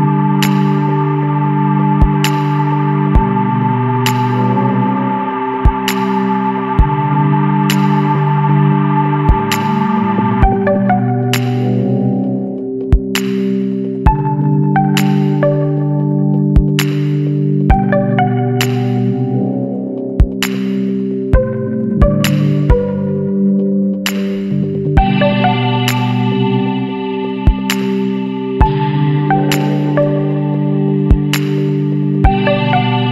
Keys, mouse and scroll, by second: 6.8 KP_0, 8.7-13.2 drag, 13.2-15.8 middle drag, 15.8-17.7 drag, 17.7 scroll down 2, 17.8 alt+a, 18.0-18.8 middle drag, 18.8 click, 19.1 scroll down 1, 19.2 middle click, 19.4 Tab, 19.9 a, 20.3 middle click, 20.8-21.2 scroll up 1, 21.2-22.6 middle drag, 22.6 shift+d, 23.8 scroll down 1, 23.9-25.3 middle drag, 25.3 click, 27.7 Tab, 27.9 scroll down 2, 28.1 middle click, 28.4 alt+a, 28.7-32.2 middle drag, 32.2 click, 32.4 Tab, 32.9 Tab.